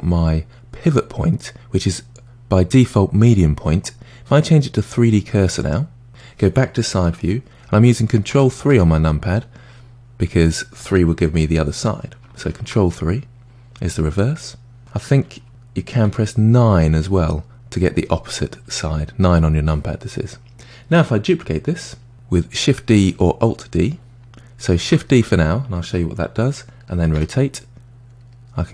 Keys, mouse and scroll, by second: 8.3 ctrl+KP_3, 11.1 KP_3, 12.4 ctrl+KP_3, 15.5 KP_3, 16.1 KP_9, 17.2 KP_9, 17.8 KP_9, 18.6 KP_9, 19.3 KP_9, 24.8 shift+d.